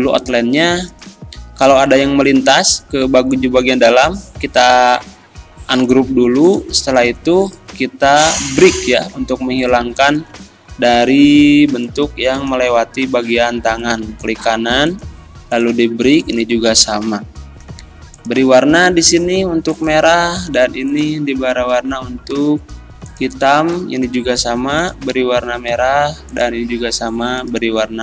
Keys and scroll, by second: 11.0 Delete, 16.6 Delete.